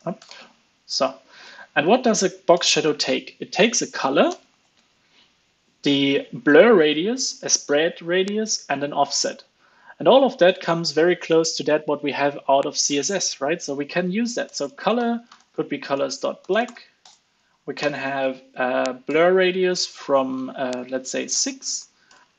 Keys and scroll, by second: 1.4 ctrl+space, 18.2 ctrl+space.